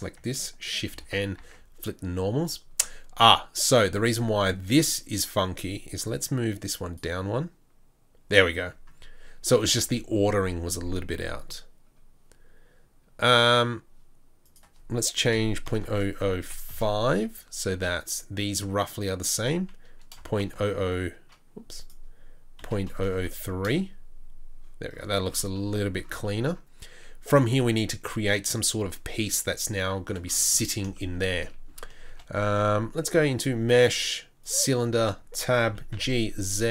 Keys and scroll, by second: 1.4 shift+n, 1.9 Tab, 15.8 KP_0, 20.6 KP_0, 24.2 KP_0, 32.0 shift+a, 34.8 Tab, 35.6 g.